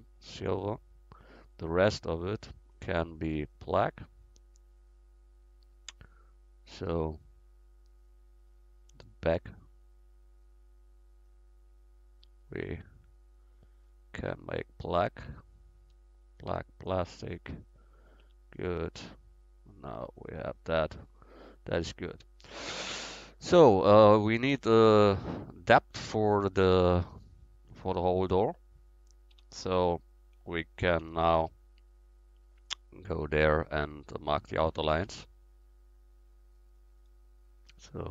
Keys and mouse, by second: 0.5 click, 2.1 middle click, 2.3 right click, 5.3 click, 5.8 click, 7.7 click, 9.5-11.2 middle drag, 11.2 right click, 16.4-18.5 drag, 18.2 Tab, 18.9 middle click, 19.3 middle click, 25.0-25.7 middle drag, 28.2-29.4 middle drag, 29.4 Tab, 31.0 a, 31.5 a, 34.0-36.0 right drag, 36.2-38.1 drag.